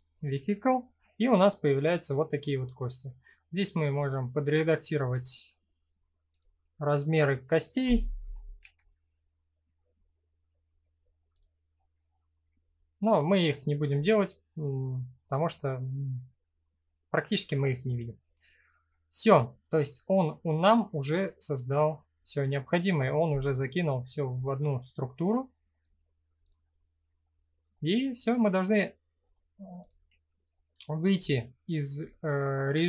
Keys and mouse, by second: 0.9-2.2 middle drag, 3.6 click, 5.9 click, 8.0 ctrl+z, 9.7 middle click, 11.0 click, 12.0-13.2 middle drag, 15.2-16.4 middle drag, 17.0-17.6 middle drag, 18.0 middle click, 19.1-20.1 middle drag, 20.4-21.1 middle drag, 21.5 middle click, 24.5-25.4 drag, 26.1 click, 26.9 middle click, 27.8-28.2 drag, 30.8-31.7 drag.